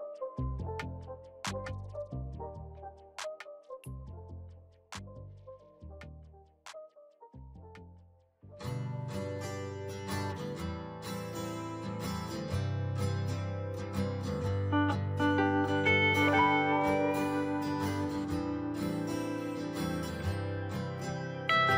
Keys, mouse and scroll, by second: 1.5 ctrl+c, 4.9-13.9 drag, 14.1-15.2 typing, 15.4 Return, 18.6 click, 20.1-21.0 typing, 21.6 Return.